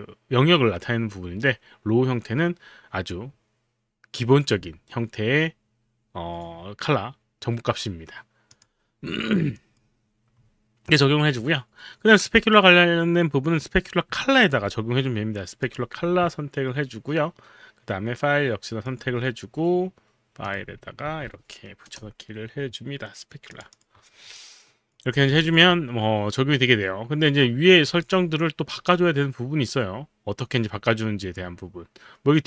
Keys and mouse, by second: 8.5 click, 9.6 click, 14.3 alt+click, 15.6 click, 18.9 click, 20.5 click, 21.0 ctrl+v, 21.9 Return, 23.6 click, 23.8 click, 24.3 alt+click, 27.8 click.